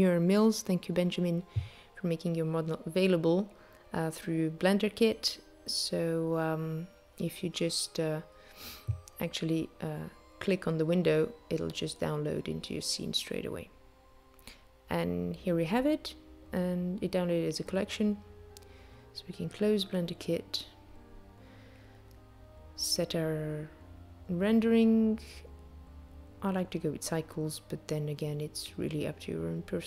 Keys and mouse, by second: 20.9 click, 22.8 click, 23.9 click, 25.0 click, 26.0 click.